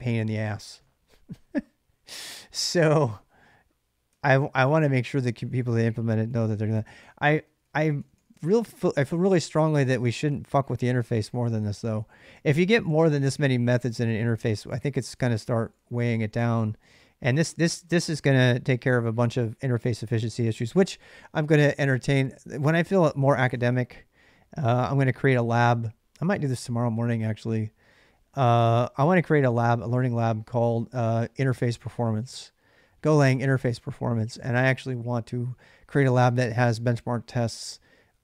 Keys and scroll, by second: 3.6-5.8 typing, 7.0-18.1 typing.